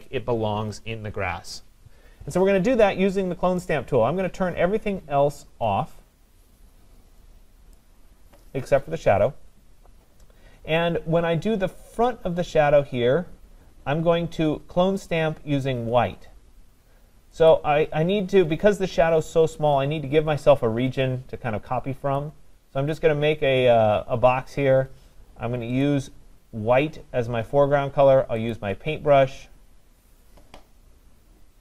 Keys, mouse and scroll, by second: 7.2 click, 7.8 click, 17.5 click, 22.2 click, 25.8 click, 28.5 click.